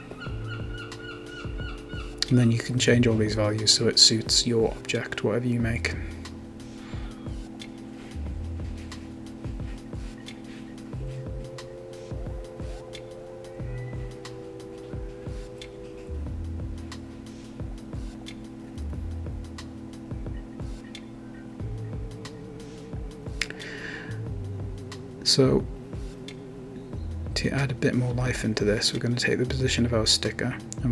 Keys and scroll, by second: 0.1 Right, 0.4 BackSpace, 0.6 5, 0.6 Return, 18.6-19.8 typing, 25.9-26.6 typing, 28.5-29.6 typing, 30.6 Return.